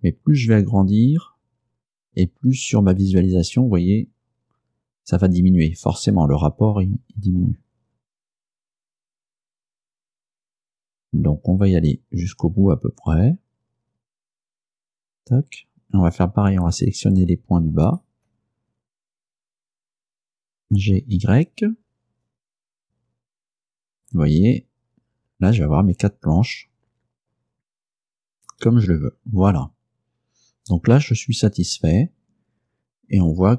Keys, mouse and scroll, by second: 15.0 click, 16.8 right click, 18.0 shift+right click, 20.7 g, 21.1 y, 28.6 click, 31.7 Tab, 33.2-33.5 scroll up 2.